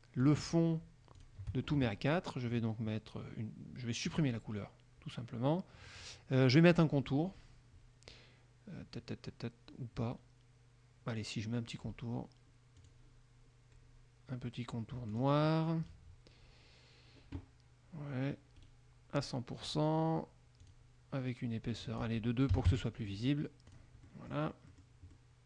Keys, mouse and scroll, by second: 0.4 shift+click, 1.3 shift+click, 4.2 click, 12.9 click, 15.3 click, 18.8 right click, 19.3 click, 20.8 click, 22.0 click, 22.4-22.9 scroll down 1, 22.7 KP_2, 22.9 Return, 23.8 click, 24.2 middle click, 24.8 middle click, 25.3 middle click.